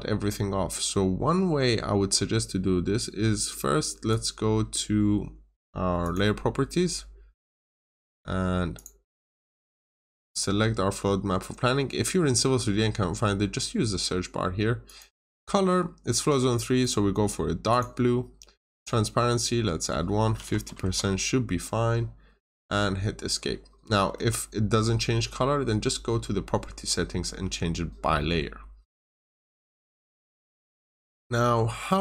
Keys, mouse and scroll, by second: 4.0 click, 20.1-20.9 typing, 22.4 click, 24.1 Escape, 28.1 middle click, 28.7 scroll up 1, 29.2 middle click, 30.6 scroll down 1, 31.1 middle click.